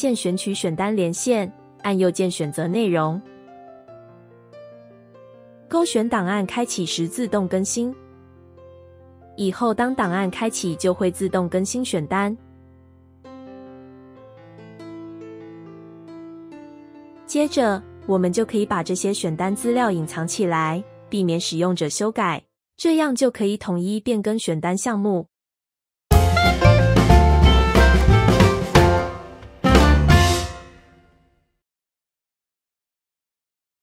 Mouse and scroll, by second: 17.8 right click.